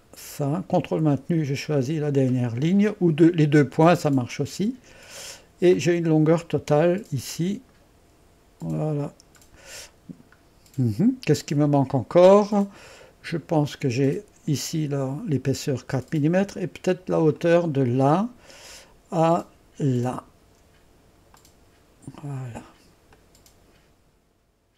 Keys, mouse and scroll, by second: 0.0 click, 2.7 click, 5.8 click, 6.6-10.3 drag, 10.5-11.1 scroll down 2, 11.1-11.6 scroll down 1, 11.6-12.4 scroll up 2, 12.4-17.1 middle drag, 17.4 click, 20.2 click, 21.4 click, 23.2-24.2 drag, 24.4 click.